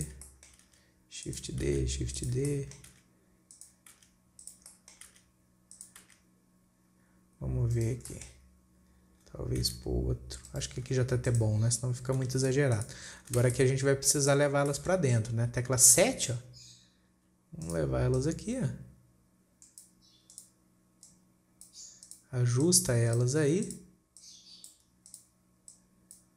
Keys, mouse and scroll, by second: 0.7-1.1 shift+middle drag, 1.1 shift+d, 2.1 shift+d, 2.9-3.4 shift+middle drag, 3.4 shift+d, 4.4 shift+d, 5.2-5.6 shift+middle drag, 5.6 shift+d, 6.5 shift+d, 8.5-10.1 shift+middle drag, 10.1 shift+d, 11.7 click, 12.7 g, 13.6 scroll down 2, 13.9 alt+a, 14.0-14.7 middle drag, 14.7-15.1 scroll up 2, 15.1-16.4 shift+middle drag, 16.4 KP_7, 16.9-17.4 scroll up 3, 18.1 click, 18.6 drag, 20.7 click, 21.5 click, 22.5 click, 24.1 drag, 24.6 click, 25.5 click, 26.2 click.